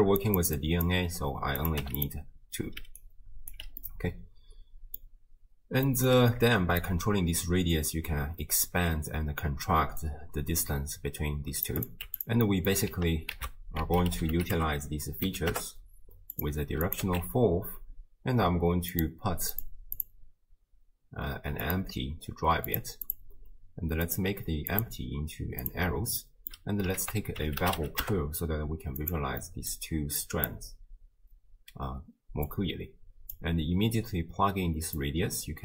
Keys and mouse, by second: 0.0-1.0 typing, 0.6 click, 1.6 click, 2.8 d, 3.0 right click, 3.5 d, 4.0-5.1 middle drag, 5.9 middle drag, 6.8-11.7 shift+drag, 12.5 middle click, 13.4 ctrl+a, 16.8 click, 18.9 click, 20.0 click, 23.1 click, 24.1 click, 24.9-25.7 drag, 26.2 middle click, 27.0 ctrl+a, 29.4 middle click, 30.2 drag, 32.5-33.4 drag, 35.0 click.